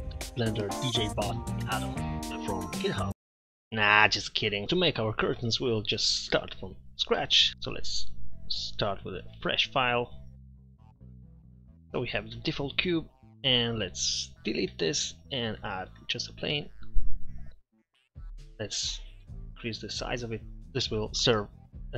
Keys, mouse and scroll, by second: 6.2 middle click, 6.7 middle click, 11.6 m, 11.6 t, 14.3 right click, 14.9 Delete, 16.0 shift+a, 18.9 Tab, 19.3 s.